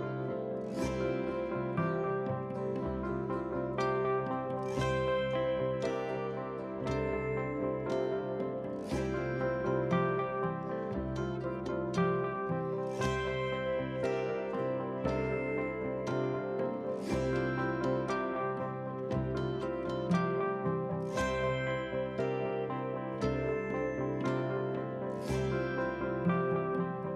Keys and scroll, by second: 19.8 ctrl+z.